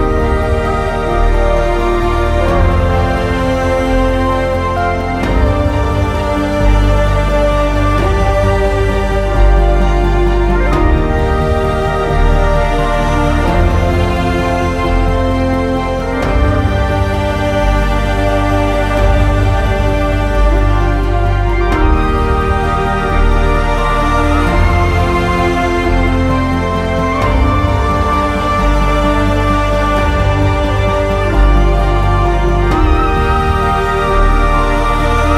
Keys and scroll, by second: 23.4 alt+x.